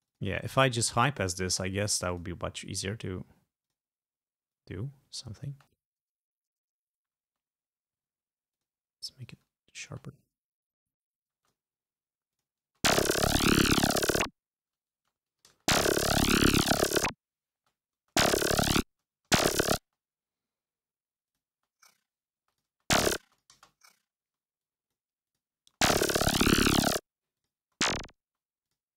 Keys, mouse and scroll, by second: 0.0 click, 1.3 click, 2.2 click, 3.7 click, 4.6 click, 5.6 space, 7.4 space, 8.6 click, 9.3 click, 10.0 space, 10.8 click, 11.4 space, 11.5 click, 12.4 click, 12.8 space, 15.0 space, 15.4 g, 15.6 space, 17.6 space, 19.0 space, 19.9 space, 20.6 scroll up 2, 21.4 click, 21.6 space, 22.5 space, 22.6 click, 23.4 click, 24.3 space, 24.7 click, 25.4 click, 25.7 space, 27.1 space, 27.4 click, 27.8 space, 28.4 space, 28.8 click.